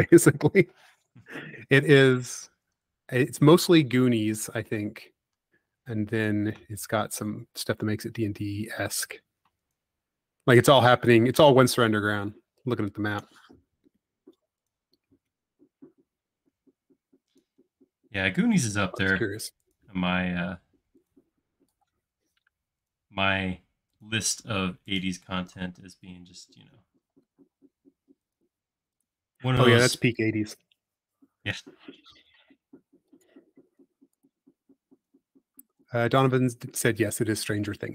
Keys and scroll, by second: 5.6 space, 7.8 |, 17.6 shift+\.